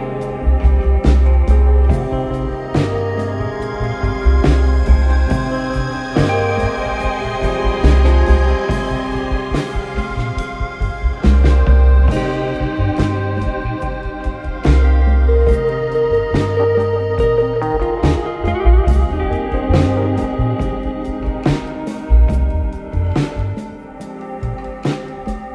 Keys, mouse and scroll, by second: 0.7 KP_7, 1.1-2.2 scroll down 1, 2.2 drag, 2.6-3.4 scroll up 7, 3.4 click, 4.1 click, 5.0 s, 6.5 click, 9.6 click, 10.9 click, 11.4 click, 13.6 click, 15.2 click, 16.3 drag, 17.1-19.8 drag, 22.1 click, 22.7 click, 23.1-24.5 scroll up 1, 24.5 click, 25.2 click.